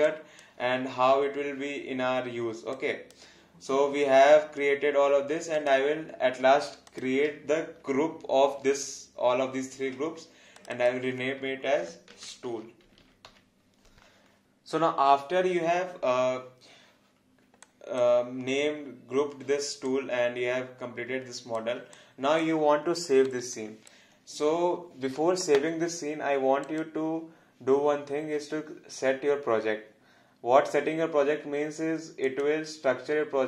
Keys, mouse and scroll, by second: 0.1 click, 2.7 click, 5.5 click, 6.9 shift+click, 9.8 ctrl+g, 10.6 click, 11.9-13.8 typing, 17.6 alt+click, 19.9 alt+click, 23.0 alt+middle click, 23.6 alt+click, 26.6 click, 32.2 click.